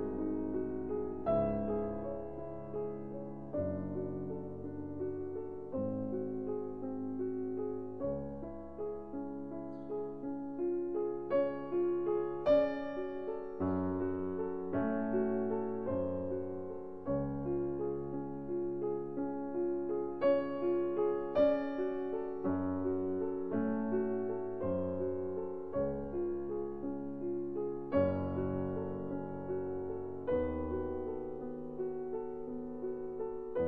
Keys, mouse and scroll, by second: 4.8 Tab, 6.8 x, 10.3-13.8 drag, 13.0 x, 14.7 Tab, 15.5 middle click, 17.8 Tab, 19.1 a, 20.0 e, 24.6 a, 25.0 a, 27.0-31.2 drag.